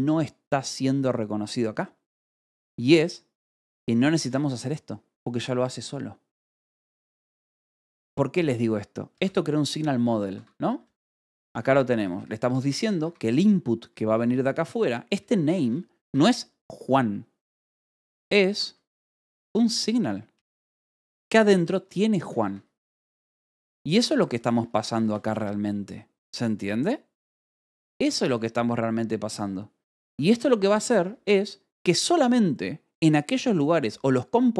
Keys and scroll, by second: 4.7 shift+v, 6.9 Escape, 7.6 j, 9.6 shift+v, 10.2 Escape, 10.6 j, 11.3 j, 11.5 Escape, 11.9 k, 12.9 Escape, 13.8 j, 14.1 k, 15.9 k, 16.3 l, 17.6-21.7 typing, 18.4 Escape, 22.3 Escape, 23.8 j, 25.9 shift+v, 30.5 Escape, 30.8 k.